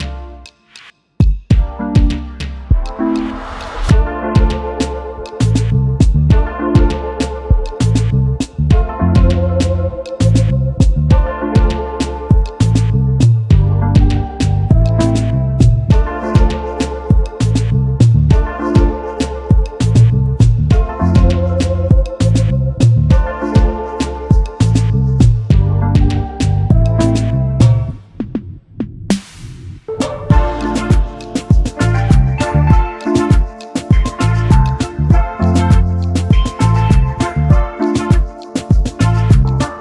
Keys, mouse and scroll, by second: 1.8-3.7 alt+scroll up 1, 5.4 alt+scroll up 2, 8.6 double click, 8.7 alt+scroll down 1, 9.4 space, 9.9 alt+scroll up 1, 14.0 double click, 16.2 ctrl+z, 16.8 double click, 25.9 double click, 28.0 click, 28.5 ctrl+x, 32.5 alt+scroll up 1, 33.2 shift+click, 34.2 right click, 35.3 double click, 35.7 ctrl+z, 36.7 double click, 38.5 ctrl+f.